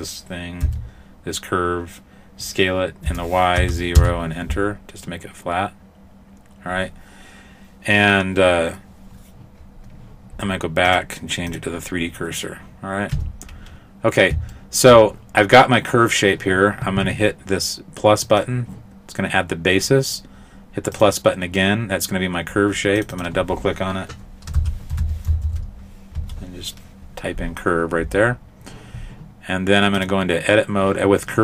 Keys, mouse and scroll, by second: 0.7 s, 10.9 click, 13.2 Tab, 14.6 shift+middle click, 18.3 click, 21.0 click, 23.0 click, 23.2 click, 30.0 click.